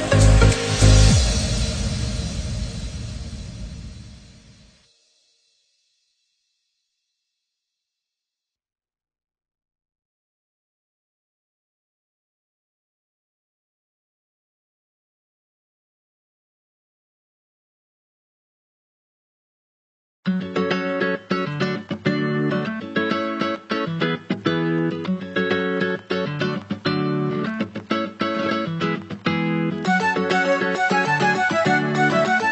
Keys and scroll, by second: 1.4 ctrl+=, 3.9 Right, 5.8 ctrl+-, 20.7 ctrl+0.